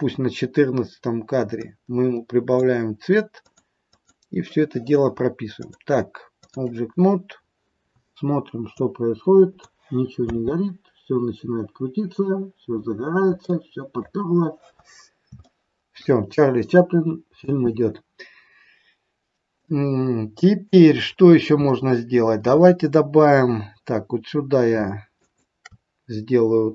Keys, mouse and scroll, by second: 1.4 click, 3.4 click, 3.9 click, 5.6 click, 6.9-7.6 scroll down 7, 8.9 click, 10.3 space, 12.8-13.2 scroll down 4, 13.4 middle click, 14.1-15.3 scroll down 3, 15.4 shift+middle click, 17.4 space, 19.5 middle click, 20.9 scroll down 4, 21.7 middle click, 25.4 shift+right click.